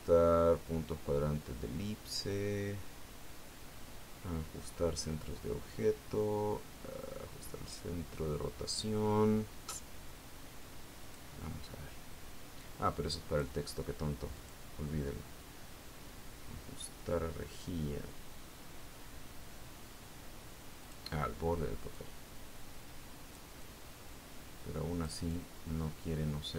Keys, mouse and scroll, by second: 12.5 click, 14.1-15.4 drag, 15.9 click, 22.3 click, 23.5-25.0 drag, 25.1-26.5 drag.